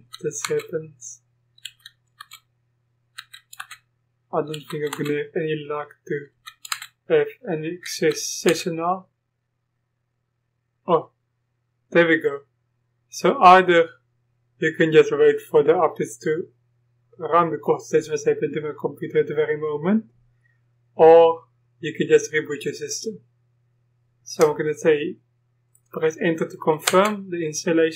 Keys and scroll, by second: 0.4 Return, 1.7 Up, 2.2 Return, 3.2 Up, 3.6 Return, 4.5 Up, 4.5 Return, 6.3 Return, 7.9 Return, 7.9 Up, 8.5 Up.